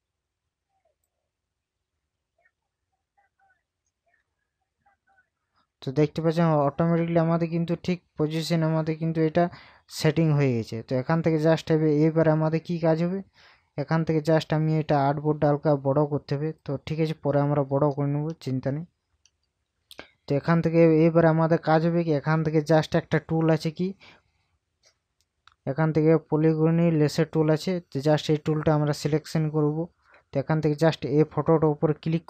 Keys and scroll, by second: 18.3 ctrl+KP_Add, 30.4 ctrl+KP_Add.